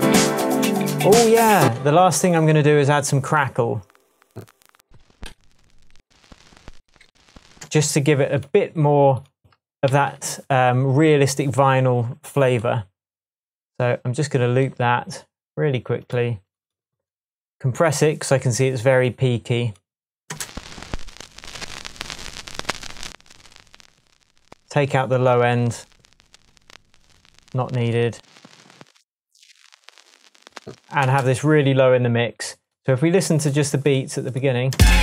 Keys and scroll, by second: 0.1 Down, 0.8 Up, 1.0 Right, 1.6 space, 2.5 Right, 4.7-5.9 Up, 6.7 Up, 7.0 Down, 7.6 space, 9.9 super+t, 20.3 space, 31.0 space, 34.7 space.